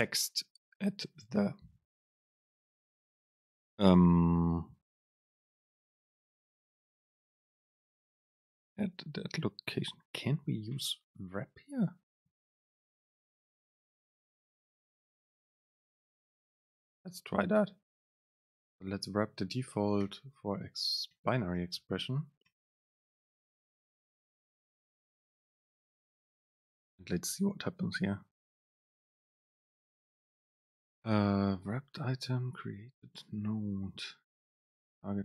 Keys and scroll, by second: 12.4 Up, 14.0 super+space, 16.1 Down, 16.6 super+space, 24.2 Down.